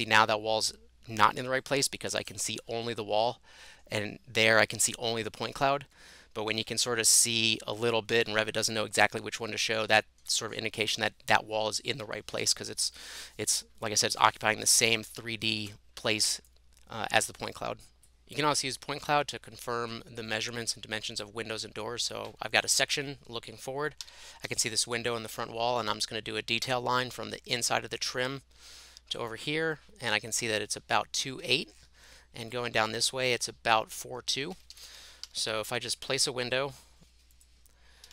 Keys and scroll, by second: 2.7 Left, 2.9 Left, 3.2 Left, 3.6 Left, 5.5 Right, 5.8 Right, 6.1 Right, 6.6 Left, 7.3 Right, 7.7 Left, 9.8 Right, 10.2 Left, 24.1-26.1 typing, 34.5 Escape, 34.7 Escape, 35.0-36.3 typing, 37.8-38.1 typing.